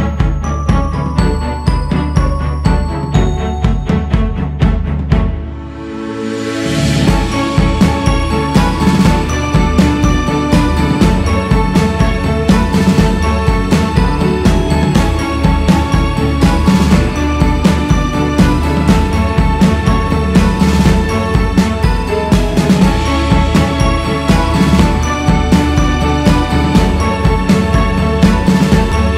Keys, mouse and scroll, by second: 0.1-1.5 drag, 1.5 scroll up 3, 2.2 q, 3.1-3.6 scroll up 1, 3.6 f, 5.3-6.2 scroll down 2, 6.2-7.3 drag, 7.3-8.0 scroll up 1, 8.6 click, 9.4-10.7 scroll up 2, 13.2 f, 16.3-19.4 drag.